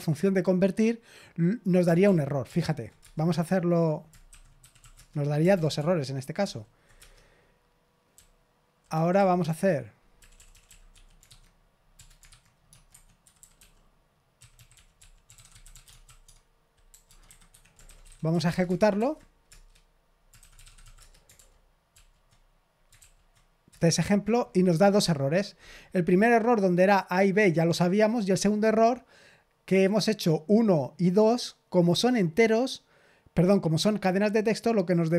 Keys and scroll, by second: 2.0 ctrl+p, 2.4 ctrl+p, 3.0 Return, 4.3-5.2 typing, 5.5 ctrl+p, 5.7 ctrl+p, 6.4 ctrl+p, 6.9 Return, 8.1-18.8 typing, 12.8 Escape, 17.4 Escape, 18.9 ctrl+p, 19.4 shift+Tab, 20.3-21.3 typing, 21.3 ctrl+p, 21.9 ctrl+p, 22.9 ctrl+p, 23.6 Return.